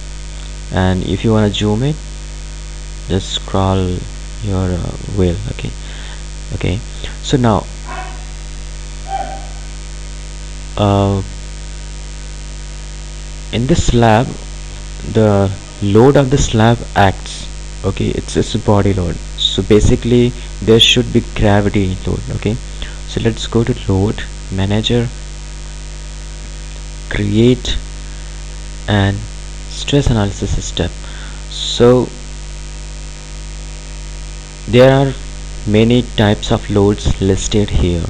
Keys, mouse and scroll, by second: 2.2-2.6 scroll up 1, 2.6-3.9 scroll down 1, 3.9-4.7 scroll up 1, 4.7-5.5 scroll down 1, 5.5-6.2 scroll up 1, 6.8 scroll down 1, 8.4 click, 23.4 click, 26.8-33.9 drag.